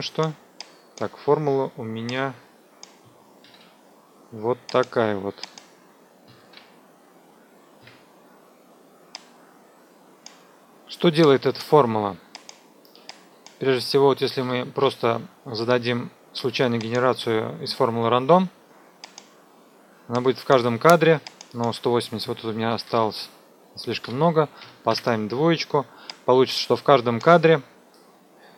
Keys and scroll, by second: 3.2 ctrl+c, 6.3 ctrl+v, 7.8 Return, 10.6 F2, 14.4 Delete, 22.5 Left, 22.7 Delete, 24.6 KP_2, 24.9 Return.